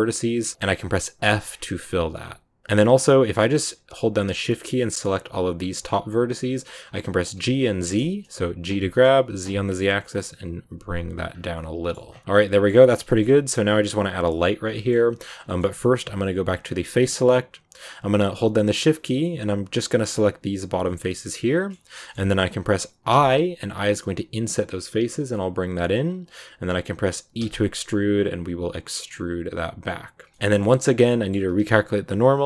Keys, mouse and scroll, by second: 1.1 f, 1.3 scroll down 1, 1.6 middle click, 2.6-3.0 scroll up 5, 3.2 right click, 3.4 middle click, 4.3 shift+right click, 5.0 shift+right click, 5.5 shift+right click, 6.1 shift+right click, 6.3 scroll down 2, 6.5 middle click, 6.7-8.6 scroll up 1, 8.6 g, 11.2 scroll down 3, 11.4 middle click, 12.0 scroll down 3, 12.1 middle click, 12.6 scroll up 1, 12.7 Tab, 13.0 shift+middle click, 13.1-14.6 scroll up 2, 13.2 middle click, 14.6-15.4 scroll up 2, 14.6 shift+middle click, 15.4-16.5 shift+middle drag, 16.5 click, 16.9-17.7 scroll up 1, 17.7 right click, 18.3-19.6 shift+right drag, 19.9 shift+right click, 20.7-22.2 shift+middle drag, 22.2-23.0 scroll up 1, 30.3 middle click, 30.6 scroll down 1, 30.7 middle click, 31.4 a.